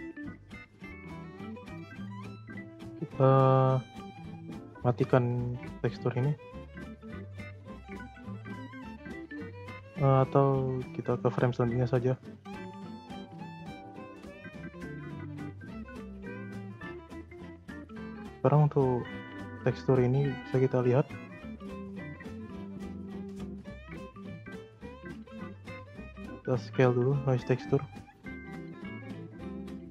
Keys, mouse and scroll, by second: 0.0 click, 0.3 shift+middle click, 1.0-1.9 scroll down 1, 1.9 click, 2.5 scroll down 2, 3.0 scroll up 1, 3.0-6.9 middle drag, 6.9 click, 8.5 click, 9.8-11.4 drag, 11.4-12.0 scroll up 4, 12.0-14.7 middle drag, 14.7 click, 15.5-16.2 scroll up 2, 16.2-16.7 shift+middle drag, 16.7 scroll down 2, 16.8-17.8 middle drag, 17.8-18.1 scroll up 1, 18.1 middle click, 18.7 scroll down 2, 19.1-20.0 scroll up 8, 19.2 middle click, 20.0-21.0 middle drag, 21.0-22.3 scroll up 6, 21.3 middle click, 22.3-22.7 scroll up 3, 22.7-24.2 shift+middle drag, 24.2-24.5 scroll up 1, 24.5-25.4 middle drag, 25.4-26.0 scroll up 2, 26.0 middle click, 26.2-26.8 scroll up 3, 26.8-28.5 drag, 28.5-28.8 scroll up 3, 28.8-29.5 middle drag, 29.5-29.9 scroll down 3.